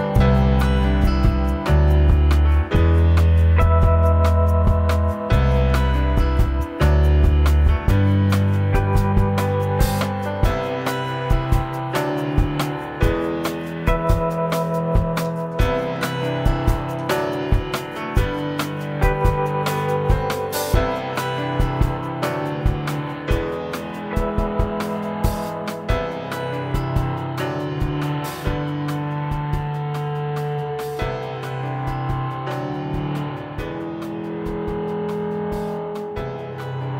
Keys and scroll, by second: 2.2 ctrl+c, 2.5 ctrl+shift+v, 9.8 Up, 10.8 ctrl+x, 10.9 ctrl+shift+v, 20.1 ctrl+z, 25.7 ctrl+z, 33.2 ctrl+-, 33.3 ctrl+0, 33.6 ctrl+=, 33.8 space, 36.6 ctrl+c, 36.7 ctrl+v.